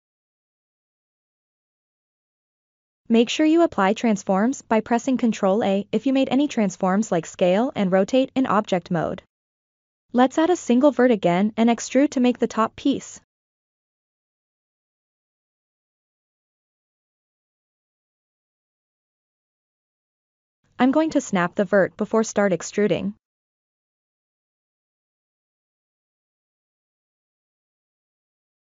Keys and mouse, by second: 2.5 ctrl+a, 5.4 click, 7.9 shift+a, 13.7-14.7 drag, 15.6-16.9 drag, 17.3-18.0 ctrl+middle drag, 18.4-19.6 drag, 20.3 alt+z, 21.4-23.3 drag, 24.2-24.7 middle drag, 25.3 KP_7, 27.1 KP_1.